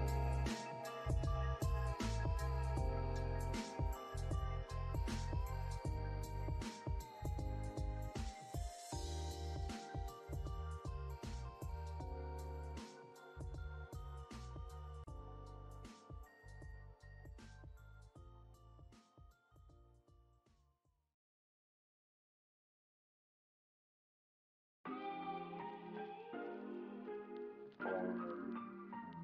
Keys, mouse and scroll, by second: 0.2 alt+click, 2.4 alt+middle click, 4.9 double click, 5.4 alt+click, 7.4 alt+click, 8.1 alt+middle click, 8.6 alt+click, 9.1 scroll up 1, 11.9 double click, 12.1 scroll down 1, 12.5 alt+middle click, 13.0 scroll up 1, 17.7 double click, 20.0 alt+click, 22.0 scroll down 1, 23.1 double click, 23.7 scroll down 1, 24.3 alt+middle click, 24.6 alt+click, 25.9 alt+middle click, 26.3 alt+scroll up 1, 26.5 scroll down 1, 27.0 s, 27.3 scroll down 1, 27.6 s, 27.7 alt+click.